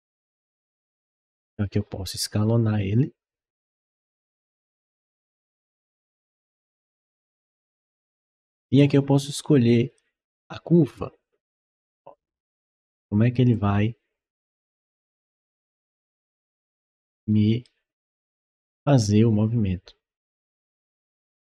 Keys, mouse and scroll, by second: 0.0-0.7 typing, 3.9-5.1 drag, 5.7-8.6 drag, 9.7 click, 11.4 click, 13.3-15.0 drag, 15.1-17.5 right drag, 15.3 d, 16.3 d, 17.0 w, 18.3-21.5 drag.